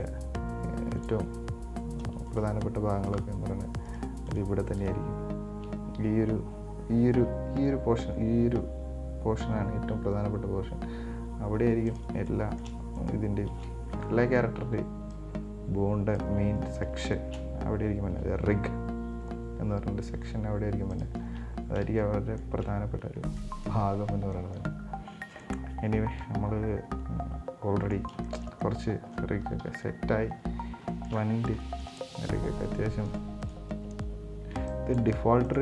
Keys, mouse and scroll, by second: 2.5 shift+right drag, 3.3 shift+right click, 4.1 shift+right click, 4.5 shift+right click, 5.0 shift+right click, 9.6 g, 12.5-13.2 shift+middle drag, 13.2 right click, 14.3-14.8 scroll down 3, 14.8 b, 16.8-17.4 scroll up 3, 17.4 shift+middle click, 18.3 g, 21.5-21.8 scroll down 2, 22.1 scroll down 3, 22.2-22.8 middle drag, 22.8 Tab, 23.5 scroll down 2, 23.6-25.3 middle drag, 25.3-25.6 scroll up 4, 25.6-29.8 middle drag, 29.8 KP_1, 30.8 scroll up 1, 31.1 shift+middle click, 31.6 scroll up 2, 31.8 shift+middle click, 32.7-33.3 scroll down 2, 33.3 right click, 33.6 right click, 34.7 b.